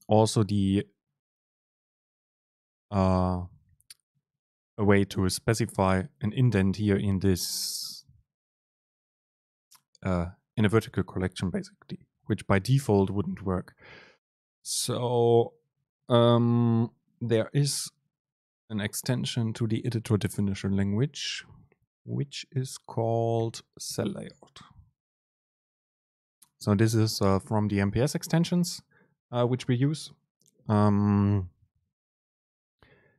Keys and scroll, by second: 12.3 shift+Down, 13.4 shift+Up, 23.5 super+l.